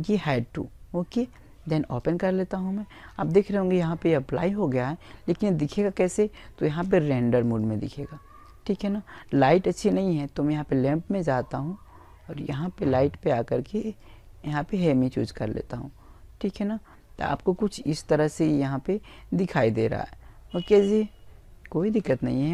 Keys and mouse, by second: 0.0 click, 3.6 click, 7.7 click, 10.4-13.3 drag, 13.7-16.5 middle drag.